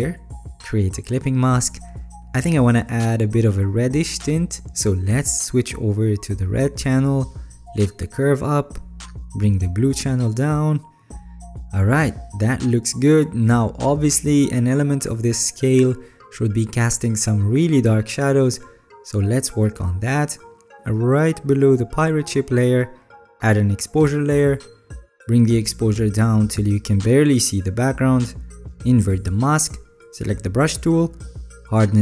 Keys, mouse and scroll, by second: 29.6-30.5 alt+scroll up 7.